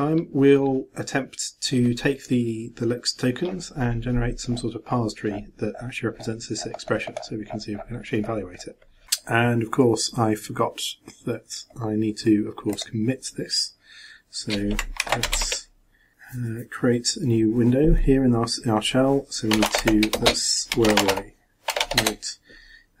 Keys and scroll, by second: 15.0 ctrl+b, 15.3 ctrl+shift+2.